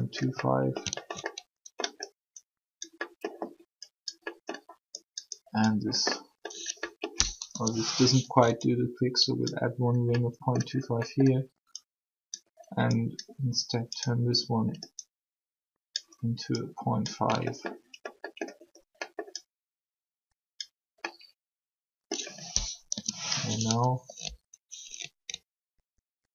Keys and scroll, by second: 7.4 3, 22.8 3.